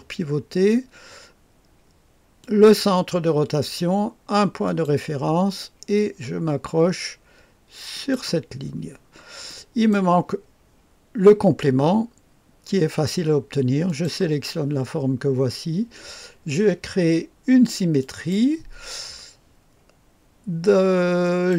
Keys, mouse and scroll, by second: 2.4 click, 4.7 click, 7.9 click, 8.9-9.5 scroll down 2, 9.5 right click, 13.9 click, 18.0 click, 21.2 click.